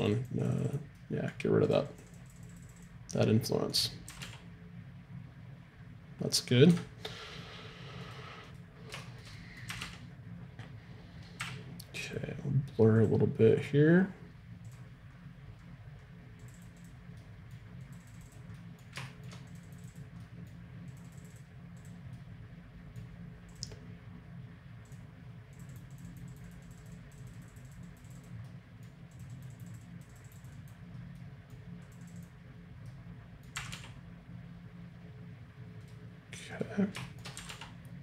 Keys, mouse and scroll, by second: 4.1 r, 8.0-10.3 right drag, 9.0 click, 9.7 r, 12.6 middle click, 13.0-15.0 drag, 15.1-16.5 middle drag, 16.5 click, 19.1-33.7 drag, 21.3-25.0 middle drag, 28.5-30.9 middle drag, 31.2-33.7 middle drag, 33.6 r, 33.7-34.8 right drag, 36.5 right click, 37.0-38.0 drag, 37.0-38.0 right drag, 37.4 r.